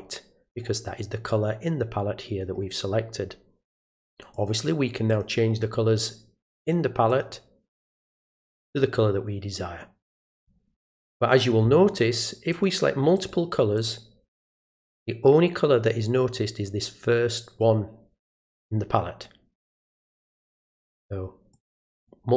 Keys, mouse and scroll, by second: 4.3 click, 5.1 click, 6.6 click, 7.1 click, 8.6 click, 10.3 click, 12.5 click, 13.1 click, 13.8 click, 14.4 click, 20.7 click, 21.5 click, 22.0 click.